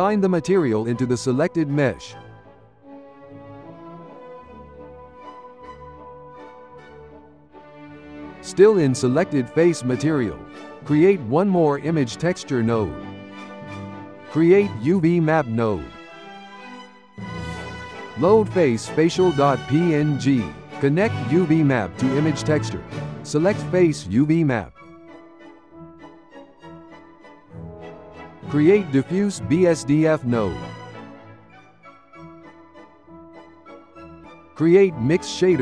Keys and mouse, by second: 1.2-2.6 drag, 2.6 Tab, 3.0 drag, 4.4 click, 5.2 z, 7.6-9.9 shift+middle drag, 10.2 shift+a, 13.7 shift+a, 16.8-18.5 ctrl+middle drag, 18.5 click, 21.9 click, 23.2-25.1 drag, 25.1-25.8 ctrl+middle drag, 25.8 click, 26.4 g, 27.4 click, 27.7 shift+a, 30.8-31.5 ctrl+middle drag, 31.5 click, 32.9-34.0 shift+middle drag, 34.0 shift+a.